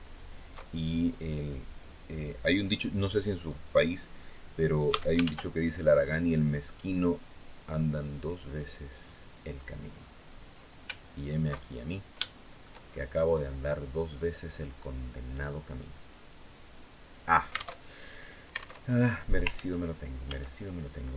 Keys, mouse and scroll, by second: 0.4-1.0 alt+shift+scroll down 3, 4.6 s, 7.9 click, 9.6-10.1 scroll up 2, 10.8 alt+shift+right click, 11.4-11.8 alt+shift+scroll down 3, 12.1 shift+middle click, 12.6-13.1 shift+scroll up 3, 13.3 scroll down 2, 14.2 scroll up 2, 14.6-15.0 scroll down 2, 17.5 alt+Tab, 18.5 alt+Tab, 19.3 ctrl+z.